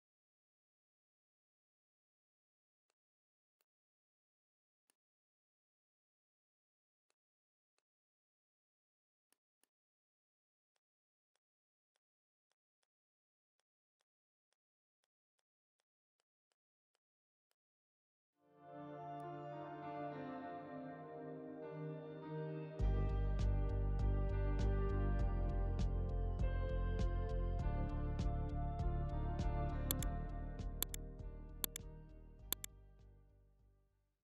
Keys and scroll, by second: 3.4 space, 8.8 shift+v, 16.0 z, 16.4 space, 16.7 v, 18.2 ctrl+g.